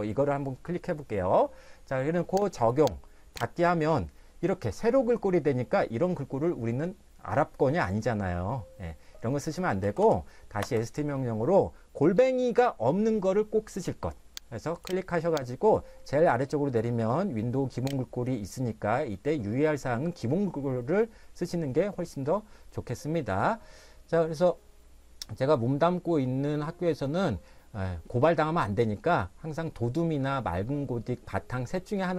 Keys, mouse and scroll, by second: 2.7 click, 9.6-10.6 typing, 14.8 click, 15.9 click.